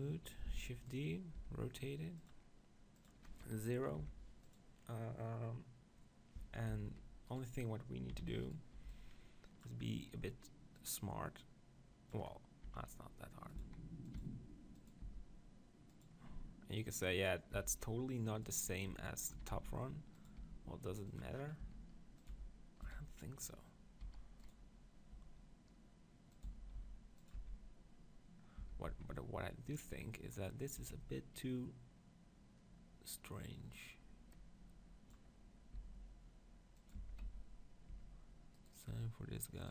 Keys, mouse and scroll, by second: 0.5 shift+d, 1.4 r, 6.7 Tab, 7.3 click, 8.1 z, 8.7 b, 10.8-12.6 drag, 12.6-14.7 middle drag, 12.7 e, 13.7 s, 14.2 e, 14.9-22.0 drag, 15.0 s, 17.7 s, 18.9 Tab, 19.4 s, 20.4 g, 21.6 s, 22.4 g, 23.9-26.3 drag, 24.0 s, 25.3 g, 26.4 click, 26.5 s, 27.4 z, 28.6 Tab, 28.9 z, 31.4 b, 35.8 s, 36.9-39.7 drag, 37.0 Tab, 37.2 z, 37.9 Tab, 38.6 right click.